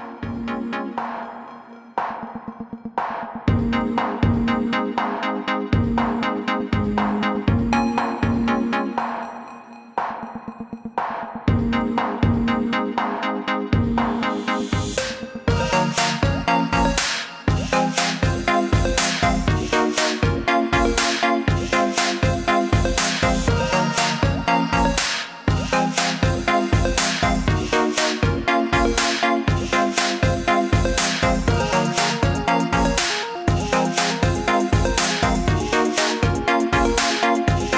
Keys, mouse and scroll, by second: 0.3 click, 0.7 alt+scroll down 1, 1.2 alt+scroll down 1, 2.0 click, 3.1-4.6 scroll down 1, 5.0 click, 6.8-7.5 alt+scroll down 2, 7.6-8.1 alt+scroll up 2, 8.1 scroll down 1, 8.5-8.9 alt+scroll up 2, 8.9-9.8 scroll down 1, 9.8 click, 10.6 alt+click, 11.4 alt+click, 12.5 click, 15.3 click, 21.6 click, 28.0 ctrl+z, 28.3 ctrl+z, 28.8 ctrl+z, 29.3 ctrl+z, 33.6 ctrl+z, 35.5 click.